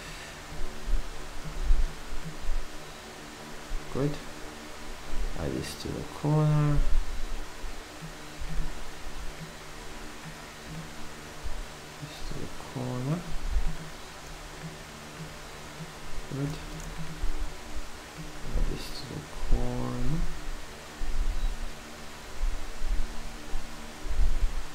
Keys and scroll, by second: 1.4 v.